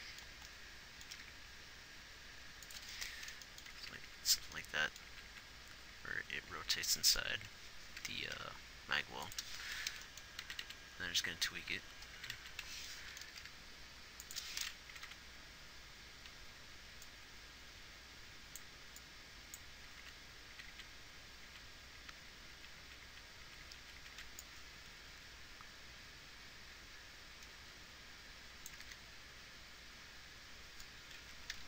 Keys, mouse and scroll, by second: 1.6 g, 4.2 Left, 5.5 Right, 5.8 Right, 6.4 Left, 6.9 Left, 7.8 Left, 8.8 g, 10.9 Right, 11.3 Right, 11.8-12.2 Left, 12.6 Right, 12.9 Right, 15.3 Right, 15.5 Right, 20.3 Left, 20.4 Left, 21.2 Right, 22.0 Right, 22.4 Right, 22.9-24.6 Right, 28.9 click, 29.3 alt+a.